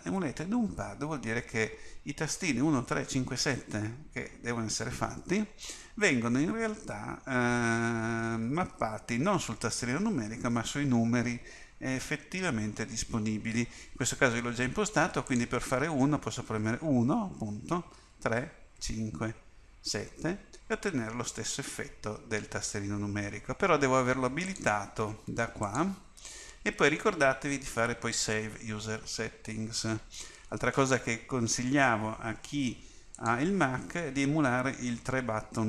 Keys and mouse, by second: 16.7 KP_1, 18.1 KP_3, 18.8 KP_5, 20.0 KP_7, 24.5-27.7 drag.